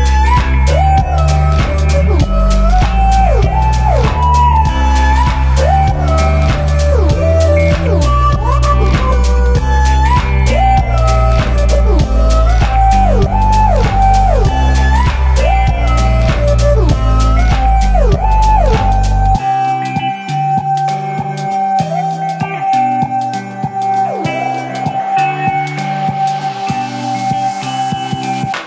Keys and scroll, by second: 10.1 super+Tab, 10.6 super+t, 13.5 g, 14.1 Down, 14.7 Return, 15.7 super+Return, 15.9 super+p, 16.4-17.4 typing.